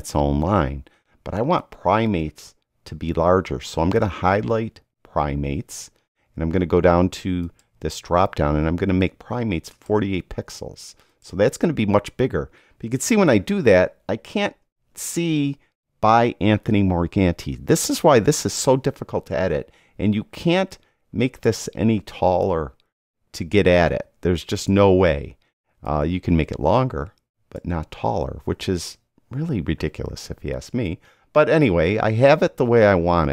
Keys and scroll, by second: 13.6 Down, 14.1 Down, 14.9 Up.